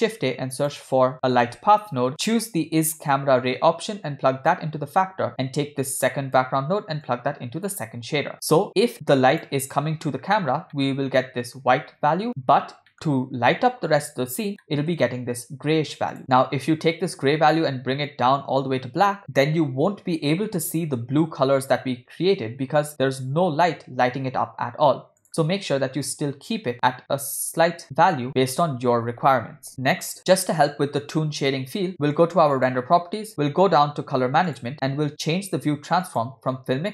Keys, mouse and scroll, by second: 3.1-5.3 drag, 5.7 click, 7.0-7.9 drag, 8.6-9.5 drag, 10.6 middle click, 11.1 scroll up 1, 11.1-12.6 scroll down 1, 12.6 scroll up 1, 12.9 middle click, 14.6 middle click, 16.1 click, 25.2 click, 32.5 click, 33.3-34.4 scroll down 5, 34.4-35.2 scroll down 2, 34.5 click, 35.2-35.9 scroll down 1, 36.0-36.9 drag.